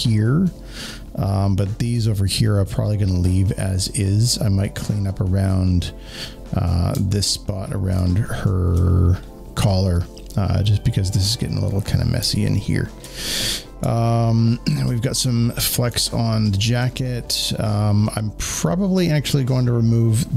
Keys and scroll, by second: 6.8 z, 7.8 space, 7.9 space, 8.0 space, 13.6 space, 13.8 space, 16.2 space.